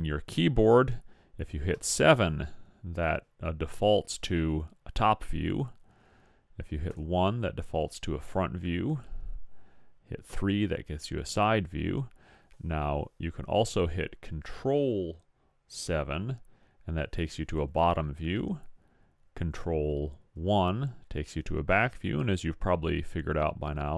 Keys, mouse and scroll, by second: 1.7 KP_7, 7.0 KP_1, 10.3 KP_3.